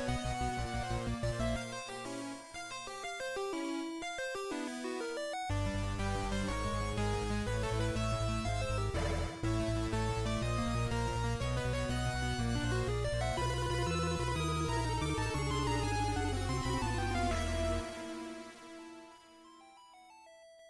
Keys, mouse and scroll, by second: 20.5 ctrl+Up, 20.5 scroll down 8.